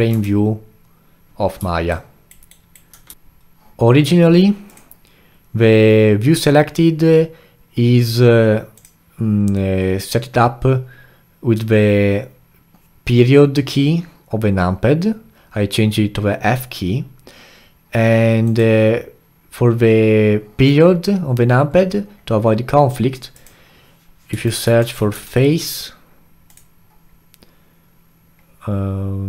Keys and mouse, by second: 0.1 f, 1.9-3.1 alt+right drag, 3.1 f.